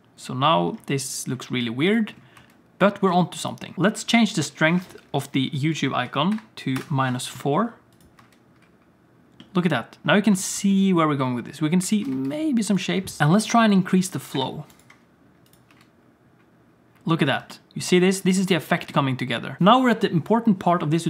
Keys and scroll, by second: 1.5 space, 2.3 space, 3.1 space, 8.1 space, 10.4 alt+shift+z, 12.0 alt+shift+z, 12.1 space, 13.2 BackSpace, 15.7 space, 17.4 space, 18.4 space.